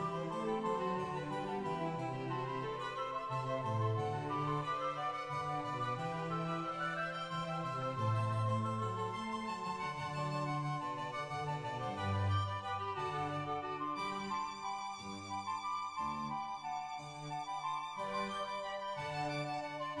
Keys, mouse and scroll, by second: 5.6 right click, 5.6 g, 8.3 shift+middle click, 8.3-9.0 scroll up 5, 9.5 shift+g, 9.7 shift+click, 10.1 g, 11.0 right click, 11.0 shift+click, 12.2 g, 13.0 right click, 14.8 right click, 16.4 click, 17.2 right click, 17.2 shift+g, 17.4 shift+click, 18.9 ctrl+s, 18.9-19.5 scroll down 2, 19.5 scroll up 4, 19.7 Tab, 19.7 click, 19.7 2.